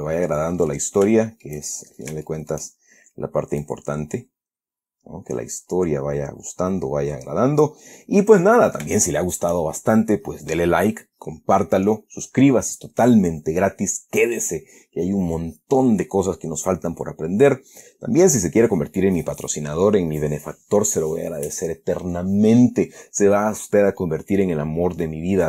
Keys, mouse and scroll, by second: 1.3 middle click, 1.4 shift+scroll up 2, 2.0-3.0 shift+middle drag, 3.0-3.4 shift+scroll up 2, 3.9-8.2 drag, 8.2 scroll down 2, 8.7 middle click, 9.9-10.4 shift+scroll up 3, 10.6-12.4 scroll down 2, 17.7 scroll up 2, 18.0-18.4 scroll down 2.